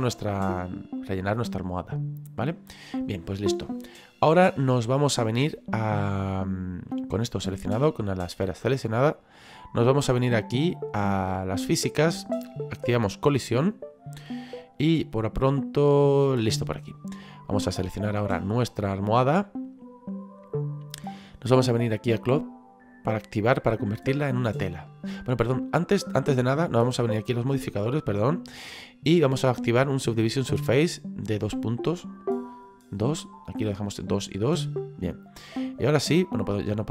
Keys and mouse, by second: 1.1 middle click, 11.4 click, 13.7 click, 17.3 right click, 22.4 click, 25.8 click, 27.1 click, 28.4 click, 30.1 click, 32.0 click.